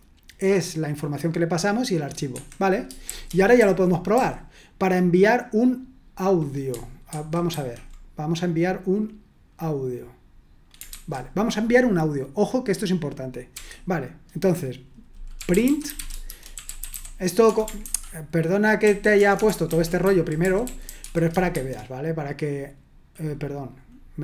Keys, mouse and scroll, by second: 2.3 Escape, 3.1 shift+g, 3.5 k, 4.1 j, 7.0 super+1, 7.5 super+2, 10.9 super+1, 13.5 typing, 15.1-17.4 typing, 17.8 ctrl+-, 18.6-21.4 typing.